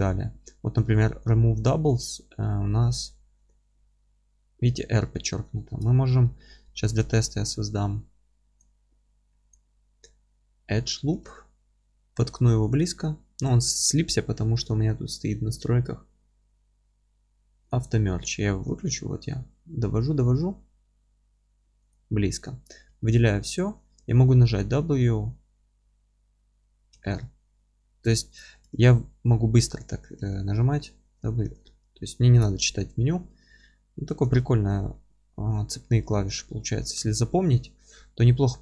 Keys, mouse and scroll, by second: 6.8 ctrl+r, 9.5 click, 9.7 scroll up 1, 10.0-13.6 middle drag, 10.3-10.7 scroll down 1, 10.7 scroll up 1, 11.0 g, 13.6 ctrl+z, 21.9 click, 22.4-38.6 middle drag, 22.7 a, 28.2 ctrl+z, 30.2 a, 32.4 ctrl+z, 38.1-38.4 scroll down 1, 38.4-38.6 scroll up 1.